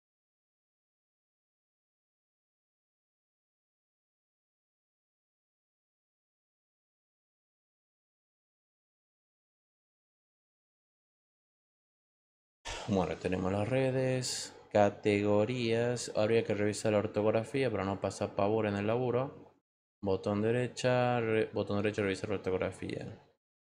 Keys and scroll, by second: 2.8 =.